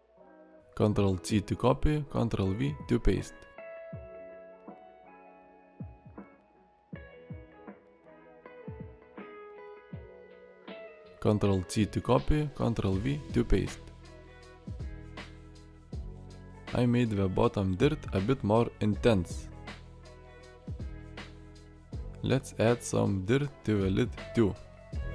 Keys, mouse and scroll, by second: 0.6 ctrl+c, 0.6 ctrl+v.